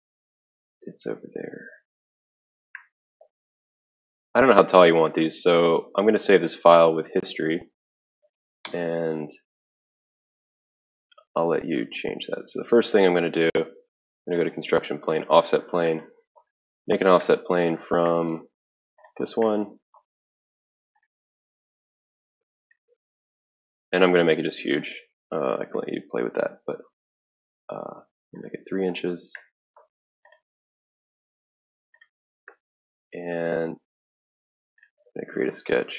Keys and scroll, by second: 8.6 Escape.